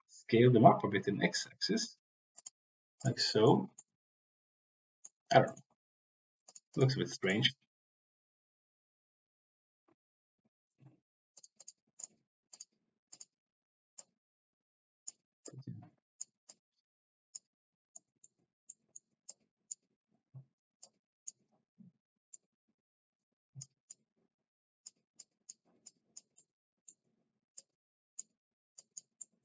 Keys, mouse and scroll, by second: 0.0 s, 2.3 drag, 2.3 x, 3.3 middle click, 3.7-5.1 middle drag, 6.7 click, 11.3 click, 11.9 click, 12.4 click, 13.9-15.1 drag, 15.3 click, 16.4 click, 17.9 middle click, 18.6 middle click, 19.2 click, 20.8 click, 22.2-23.6 drag, 23.8 click, 25.2 click, 25.8 click, 26.3 middle click, 27.5 click, 28.8 click, 29.2 middle click.